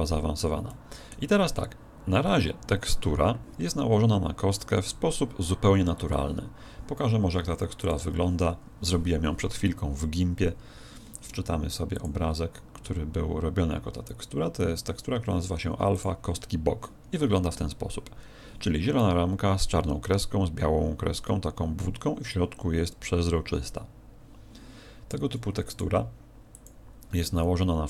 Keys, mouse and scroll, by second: 0.7 middle click.